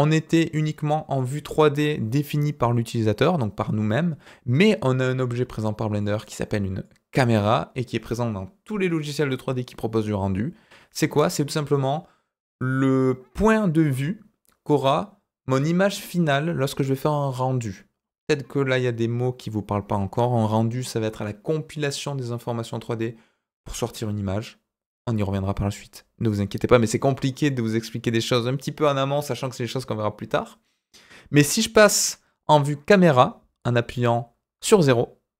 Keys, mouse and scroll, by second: 5.1 scroll down 2, 5.9 click, 6.8 click, 34.5 KP_0.